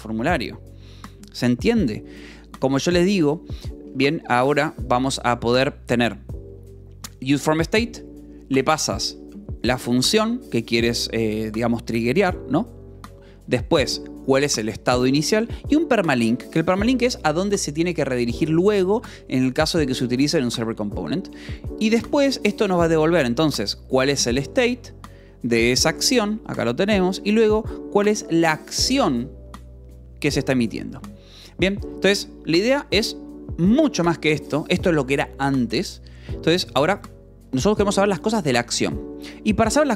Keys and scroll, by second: 3.0-5.5 typing, 8.5 Escape, 9.0 v, 9.6 e, 9.9 Escape, 10.0 l, 13.0 e, 13.5 v, 14.6 Escape, 15.2 l, 15.7 v, 16.2 e, 16.3 Escape, 20.4 h, 20.8 j, 22.6 k, 24.4 s, 25.2 f, 26.4 v, 27.0 e, 27.1 Escape, 28.2 l, 28.7 v, 29.3 e, 29.8 Escape, 31.0 j, 32.4 shift+v, 34.6 Escape.